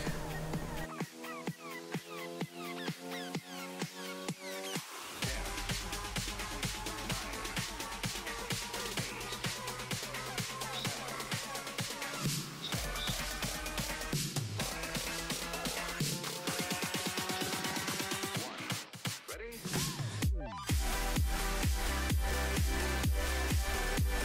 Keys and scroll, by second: 0.7 s.